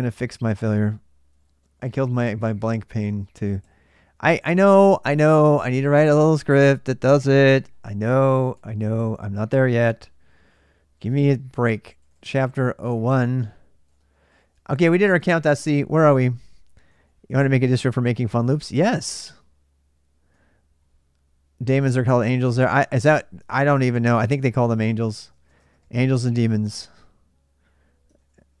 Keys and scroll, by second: 0.0 ctrl+l, 0.1 ctrl+l, 0.3 ctrl+a, 0.4 ctrl+l, 0.5 ctrl+l, 0.6 ctrl+l, 0.8 ctrl+l, 0.9 ctrl+l, 1.1 ctrl+a, 1.3 ctrl+l, 1.5 ctrl+l, 1.6 ctrl+l, 1.8 ctrl+l, 1.9 ctrl+l, 2.1 ctrl+l, 2.2 ctrl+l, 2.4 ctrl+a, 2.7 ctrl+l, 3.3 ctrl+a, 3.4 ctrl+h, 4.2-6.8 typing, 7.0 Return, 8.1 ctrl+a, 8.3-19.2 typing, 9.6 Return, 20.3 typing, 21.7-22.8 j, 23.2 ctrl+[, 23.3 ctrl+j, 23.8 typing, 24.9-28.6 typing, 27.9 ctrl+[, 27.9 ctrl+j.